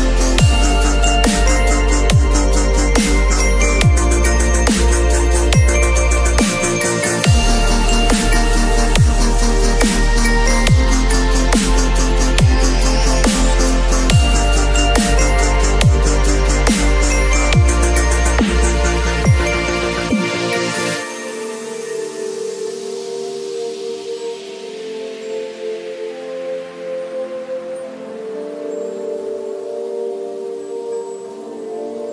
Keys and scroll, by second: 8.5 b, 8.9 x, 11.8 x, 14.7 ctrl+z.